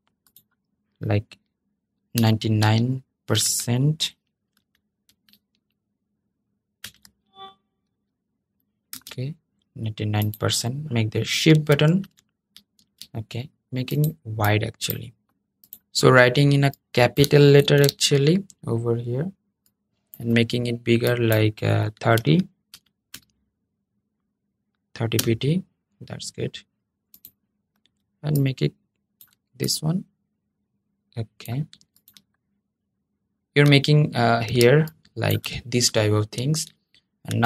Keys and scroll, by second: 6.5 super+5, 8.6 super+a, 12.5 super+a, 17.3 super+v.